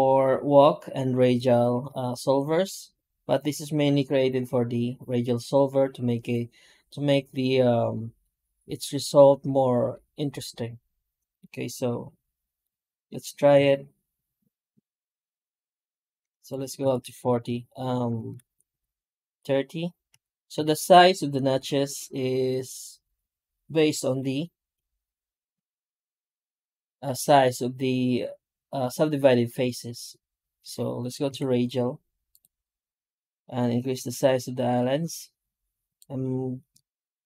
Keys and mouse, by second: 31.2 F9.